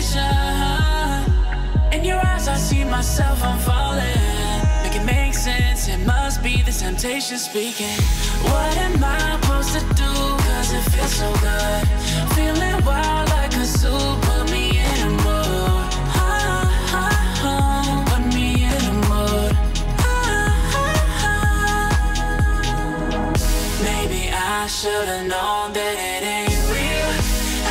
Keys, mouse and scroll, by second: 0.5 click, 2.5-3.7 alt+scroll down 2, 3.7-4.1 alt+scroll down 1, 4.1-4.6 alt+scroll up 2, 4.6 alt+scroll up 1, 5.1 click, 6.1-6.8 alt+shift+click, 7.6 alt+scroll down 1, 8.1 click, 10.4 F7, 12.1-13.8 drag, 14.1 alt+scroll up 1, 14.9 alt+scroll down 1, 17.3 ctrl+shift+], 18.1 alt+scroll up 1, 19.0-19.7 alt+shift+click, 20.0 alt+scroll down 1, 20.1 alt+scroll up 1, 20.2 click, 20.9 click, 22.1 click, 22.2 alt+scroll up 1, 22.2 click, 22.4 alt+scroll down 1, 22.5 click, 22.7-23.0 alt+scroll up 1, 23.0 click, 23.3 click, 24.1 alt+scroll up 1, 24.2 click, 24.3 alt+scroll down 1, 24.8 Left, 24.8 click, 24.9 alt+scroll down 1, 25.0 alt+scroll up 1, 25.0 click, 25.8 alt+scroll up 1, 25.9 alt+scroll down 1, 25.9 alt+scroll up 1, 26.0 click, 26.4 click, 26.5 Delete, 26.7 alt+scroll down 2, 27.0 ctrl+z, 27.2 click.